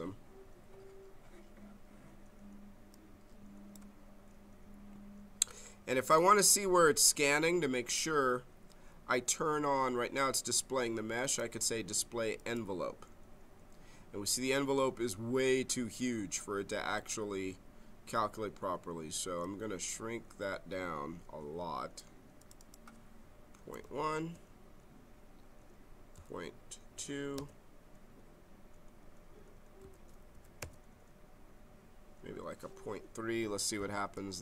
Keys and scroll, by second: 23.8 1, 24.1 Return, 26.1 ., 26.9 2, 27.3 Return, 29.8 ., 30.3 3, 30.6 Return.